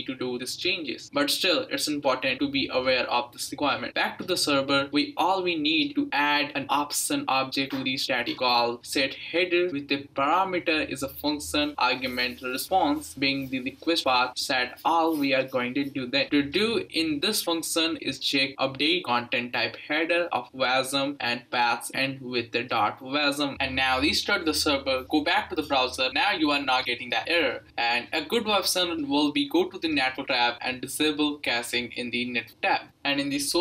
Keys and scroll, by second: 4.2-9.2 typing, 4.6 Return, 10.3-11.5 typing, 12.5-23.9 typing, 24.4 Return, 26.4 Return.